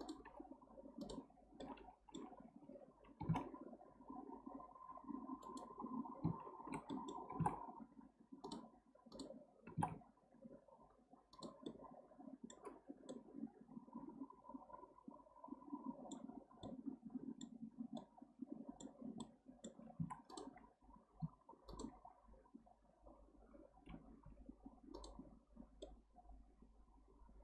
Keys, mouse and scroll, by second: 0.0 click, 1.0 click, 1.6-3.2 middle drag, 3.2 g, 6.9 middle click, 7.3 g, 9.1 click, 9.7 g, 11.7-16.1 middle drag, 16.3 scroll up 1, 16.6-19.0 middle drag, 19.0 scroll down 1, 19.2-20.0 middle drag, 20.0 1, 20.3 click, 21.3 2, 21.7 click, 24.2 x, 25.8-27.4 middle drag.